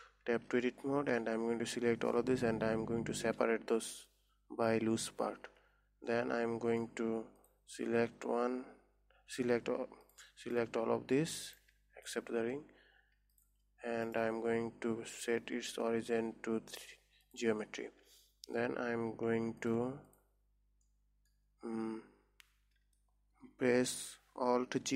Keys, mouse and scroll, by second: 0.5 Tab, 1.6 a, 3.3 p, 5.9 Tab, 6.7-7.9 middle drag, 7.9 click, 9.2-9.9 scroll up 1, 9.9 a, 10.5 click, 12.5 shift+click, 13.8 shift+click, 14.6-19.1 right drag, 19.1 Tab, 19.8 Tab, 20.1 click, 20.6 click, 21.4 middle click, 22.1-23.2 scroll up 2, 23.2-24.9 scroll up 1.